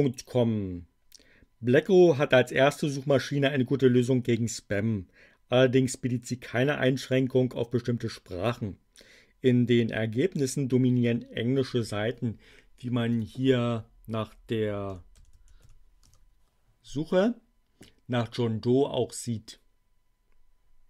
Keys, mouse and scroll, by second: 13.0 click, 14.1-16.0 typing.